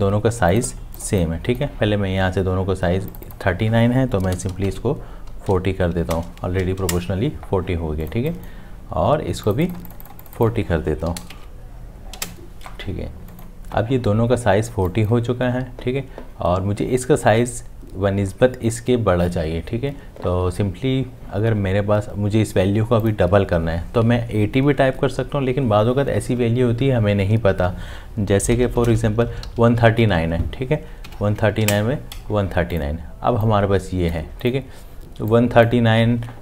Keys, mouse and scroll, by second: 4.2 KP_4, 4.3 4, 4.6 Tab, 6.1 BackSpace, 6.8 Return, 11.1 4, 11.2 4, 11.3 Tab, 12.1 Return, 28.6 shift+Home, 29.5 3, 31.6 Return.